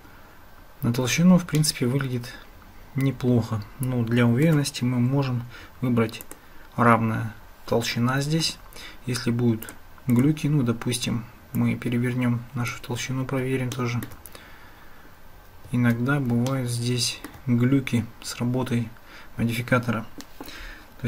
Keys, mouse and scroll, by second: 1.6-4.5 shift+middle drag, 6.2 click, 9.7 click, 10.1 click, 11.7-12.8 drag, 13.8 shift+click, 16.5-17.3 shift+middle drag.